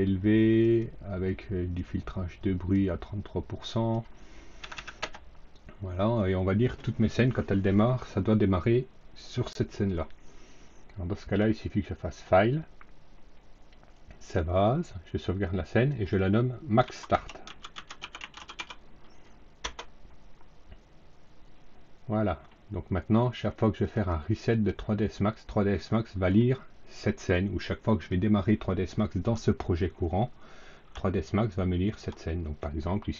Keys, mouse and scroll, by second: 0.5 click, 1.7-2.7 drag, 3.5 click, 4.5 KP_3, 4.9 KP_Enter, 12.0 click, 13.9 click, 15.6 click, 16.5-19.0 typing, 19.5 Return, 23.7 click, 24.4 click, 25.8 click, 31.2 alt+middle click, 32.5 alt+middle click.